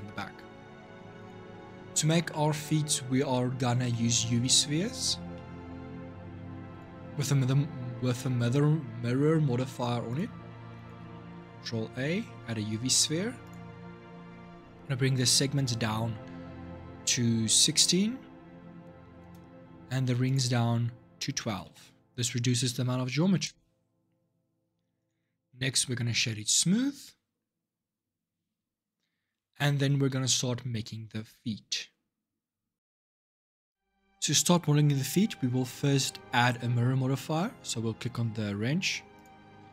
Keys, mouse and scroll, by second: 0.5 Tab, 1.0 click, 1.3-1.7 middle drag, 1.7 scroll down 2, 2.1-3.9 shift+middle drag, 3.9 scroll down 1, 4.1 scroll up 2, 4.5-6.5 middle drag, 6.5 click, 7.0-9.9 middle drag, 9.9 click, 10.5 click, 11.1 shift+a, 14.9-18.1 drag, 20.0-23.2 drag, 24.8 click, 25.4-28.6 right drag, 32.7 ctrl+shift+Left, 38.9 click.